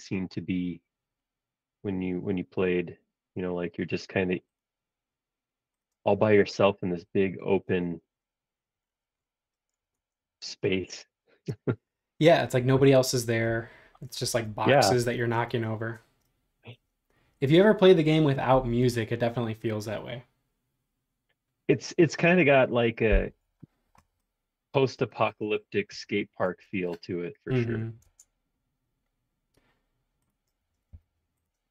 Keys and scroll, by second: 6.0 space, 6.9 e, 10.0 super+Tab, 14.2 super+Tab, 26.4 space, 28.0 super+Tab, 31.0 r.